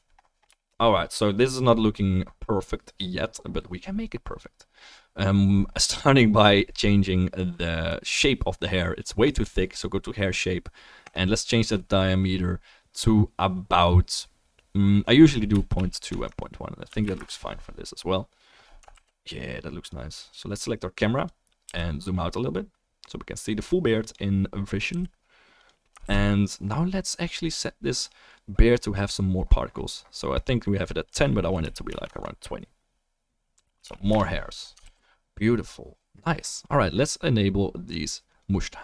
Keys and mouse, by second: 1.5 click, 2.4-9.7 drag, 19.0 ctrl+s, 19.9-21.1 drag, 21.2 click, 21.6 g, 21.8-24.1 drag, 25.0-31.0 right drag, 25.0 g, 26.1 ctrl+s, 26.1 ctrl+d, 28.2 click, 35.0 ctrl+s, 37.8-38.8 drag, 37.8-38.8 right drag.